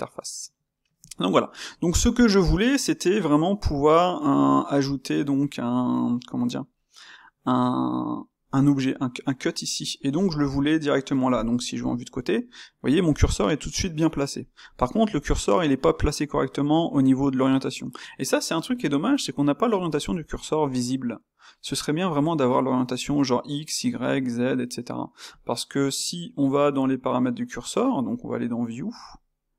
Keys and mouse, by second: 11.7 KP_3, 12.4-26.3 ctrl+middle drag, 26.3-29.5 drag.